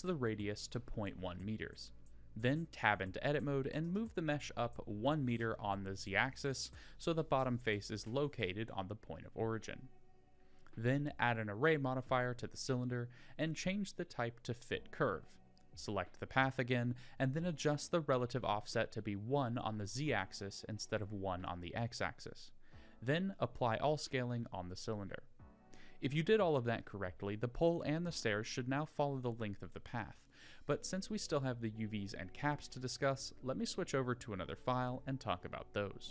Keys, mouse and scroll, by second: 1.8 scroll up 2, 2.9 KP_1, 4.2 Tab, 5.3 g, 7.8 Tab, 8.6 s, 11.3 Tab, 11.9 Tab, 12.4 click, 13.7 click, 15.5-17.5 drag, 18.3-19.3 drag, 21.9-23.6 drag, 24.1 click, 24.7 Tab, 25.2 click, 25.6 g, 30.8-32.5 middle drag, 32.7 Tab, 34.5 click.